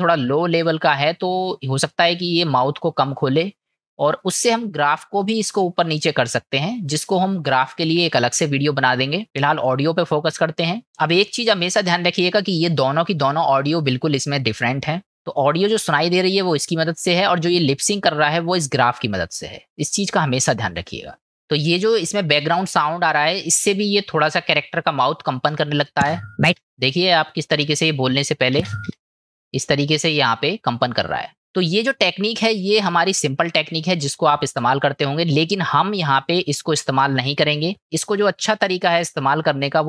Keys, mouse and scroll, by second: 11.1 click, 12.5 click, 13.2 click, 13.8 click, 15.3 click, 22.5 middle click, 24.4 click, 26.0 space, 27.9 click, 35.1-36.2 middle drag.